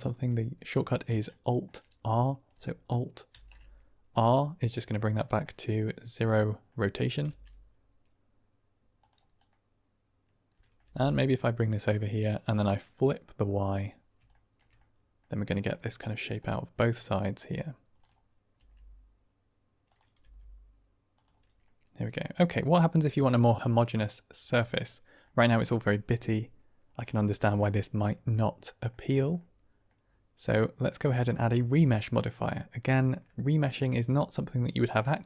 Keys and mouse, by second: 1.2-1.5 shift+middle drag, 3.6 alt+r, 4.6 middle drag, 5.3-6.6 drag, 7.2 g, 9.5-10.1 drag, 10.1-10.7 middle drag, 11.1 g, 12.6 click, 14.2 shift+drag, 14.7 middle drag, 14.9 click, 14.9 middle click, 15.1 click, 15.6-16.3 middle drag, 16.8 click, 17.3 middle drag, 17.9-18.5 drag, 18.7 r, 20.5 g, 21.6-22.2 drag, 22.2 middle click, 22.7-23.1 middle drag, 23.3 shift+middle drag, 25.1 middle click, 26.9 click, 28.2-28.8 middle drag, 29.3-29.9 middle drag, 31.1-33.2 drag, 33.9-35.2 middle drag.